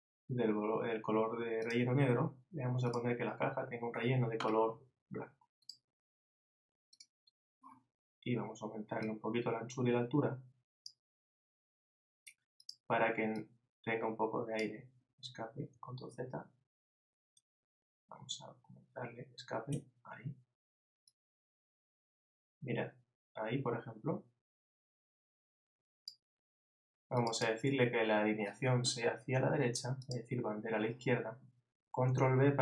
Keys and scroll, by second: 16.1 super+z, 32.1 super+b.